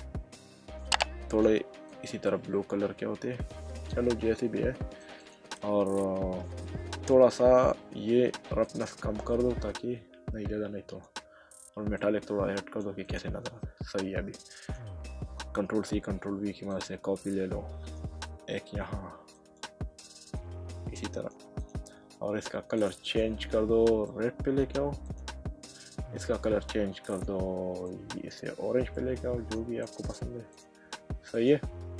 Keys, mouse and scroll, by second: 1.9 click, 3.7 click, 4.3 middle click, 5.2 click, 8.7 click, 12.0 click, 13.0 click, 13.6 middle click, 15.8 ctrl+c, 16.0 ctrl+v, 16.7 click, 18.6 ctrl+v, 19.3 click, 21.6 click, 22.8 click, 27.1 click, 28.9 click.